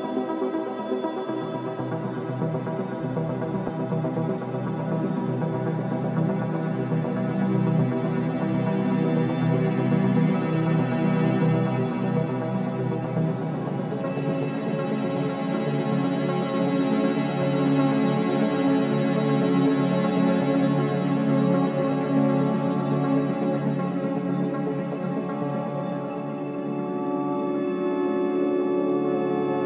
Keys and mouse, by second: 0.6 g, 3.1 s, 8.0 click, 9.4 g, 11.8 shift+d, 14.0 r, 17.0 shift+d, 19.1 r, 27.4 shift+click, 29.0 click.